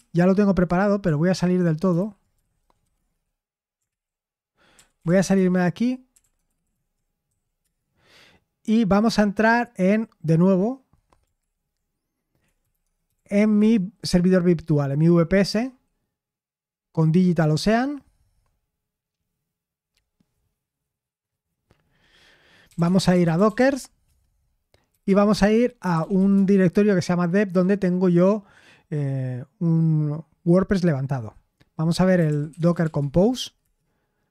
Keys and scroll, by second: 0.6 Escape, 1.3-3.3 typing, 1.9 super+h, 3.8 ctrl+l, 4.5-7.2 typing, 7.6 Return, 11.4 ctrl+l, 12.2-13.6 typing, 15.4 Return, 22.4-26.6 typing, 29.0 typing, 31.9-33.6 typing.